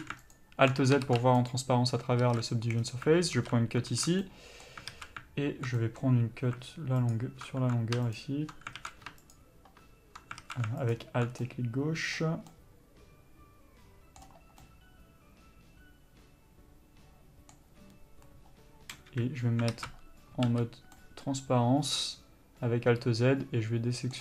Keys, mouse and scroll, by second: 0.5 alt+click, 3.0 scroll down 1, 4.4-7.3 middle drag, 7.3 click, 8.3 click, 9.5 click, 11.0 alt+click, 11.7-24.2 middle drag, 19.3 KP_3.